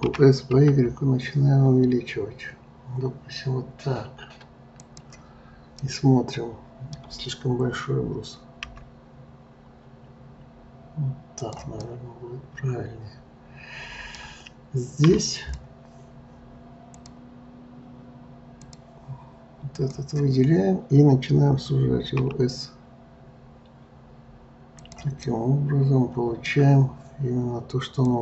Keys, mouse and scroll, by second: 0.1 s, 5.8-8.7 middle drag, 8.7 s, 11.8-14.9 middle drag, 15.3 click, 16.9-19.9 drag, 22.2 s, 25.3-28.2 middle drag.